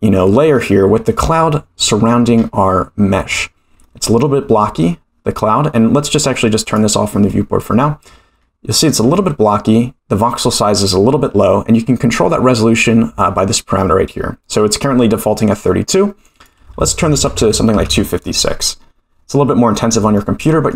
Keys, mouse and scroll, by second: 2.4-3.2 scroll up 4, 3.2-3.8 scroll down 3, 3.8-4.9 middle drag, 6.6 click, 7.3-8.1 middle drag, 8.4-9.2 scroll up 2, 9.2-10.8 middle drag, 16.3-18.5 drag, 20.1-20.7 middle drag.